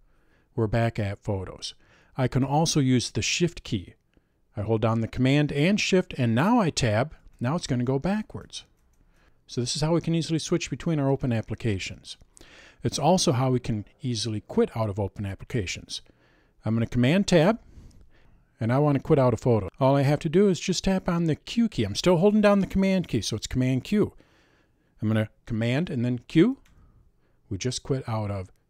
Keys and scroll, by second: 7.2 shift+super+Tab, 11.1 super+Tab, 17.4 super+Tab, 26.7 super+q.